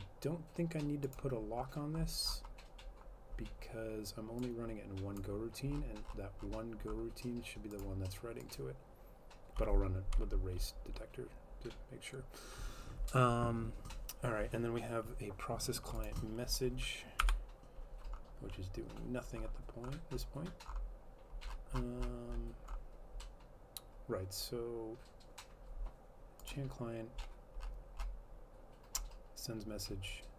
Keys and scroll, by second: 17.3 F12.